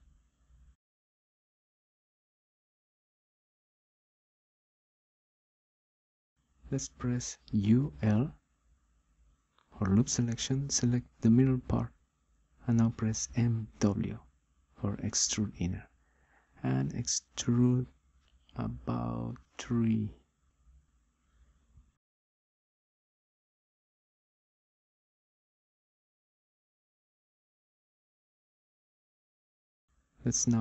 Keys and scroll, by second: 9.8 u, 10.4 l, 14.4 m, 15.2 w.